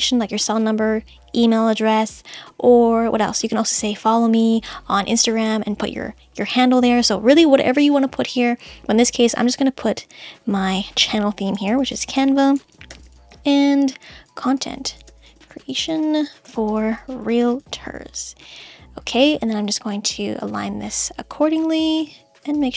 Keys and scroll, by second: 11.7 shift+c, 12.1 space, 12.9 shift+7, 13.0 space, 14.3-17.0 typing.